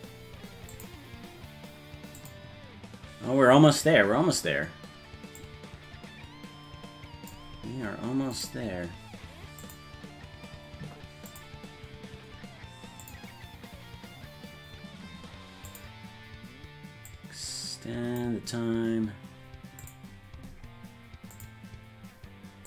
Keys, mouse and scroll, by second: 0.7 click, 2.2 click, 5.4-7.3 drag, 8.3 click, 9.6 click, 11.3 click, 13.0 click, 15.7 click, 17.1-18.2 drag, 19.8 click, 21.3 click.